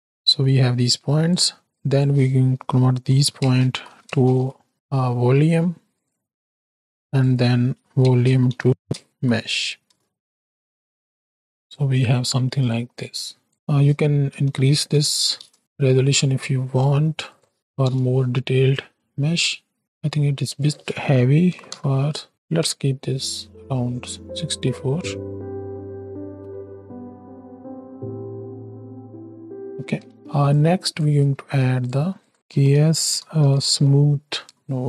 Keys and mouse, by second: 0.0-1.3 drag, 1.6-6.2 drag, 6.8-11.3 drag, 11.5 click, 12.2 middle click, 12.7 click, 13.2-15.5 drag, 17.4 click, 18.9 middle click, 19.5 space, 19.8 space, 20.5-22.3 drag, 22.3 shift+Right, 22.3 shift+Left, 22.6 space, 25.6 click, 25.6 middle click, 25.6 right click, 28.3 shift+Left, 29.9 space, 30.6 click, 31.3 shift+a.